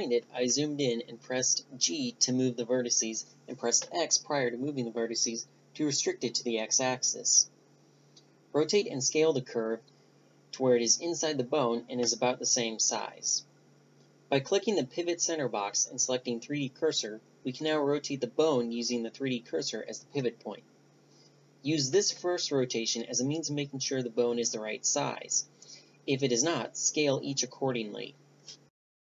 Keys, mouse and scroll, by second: 0.5-3.5 middle drag, 3.8-5.9 middle drag, 4.3 g, 8.4-9.7 middle drag, 8.9 Tab, 10.5 KP_1, 10.8 r, 11.9-12.6 drag, 12.0 s, 15.0-16.6 right drag, 15.9 Tab, 18.1 click, 19.1 click, 19.8 r, 28.0 middle click, 28.2-29.0 right drag, 28.8 r.